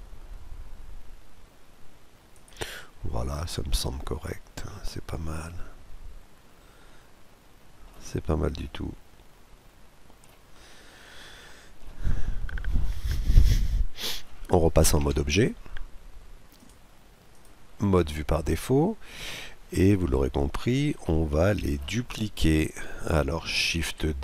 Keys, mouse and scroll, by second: 2.8-4.6 middle drag, 7.9-8.3 scroll down 1, 8.3-10.1 middle drag, 10.2-11.0 scroll down 1, 11.0-12.6 middle drag, 13.1-14.8 middle drag, 14.8 Tab, 17.1 click, 17.7 scroll down 1, 17.8-20.0 middle drag, 20.6-22.4 middle drag, 23.5 shift+d.